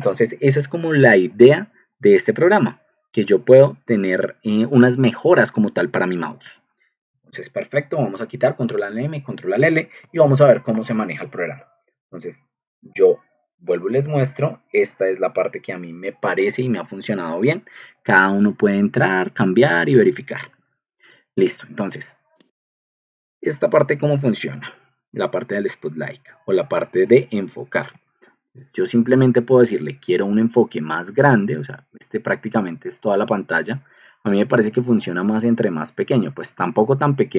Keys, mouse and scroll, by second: 6.9 Escape, 8.2 ctrl+alt+m, 8.5 ctrl+alt+l, 9.9 alt+Tab, 14.0 ctrl+2, 27.5 ctrl+alt+m, 28.4 ctrl+alt+m, 29.0 ctrl+alt+m, 29.6 ctrl+alt+m.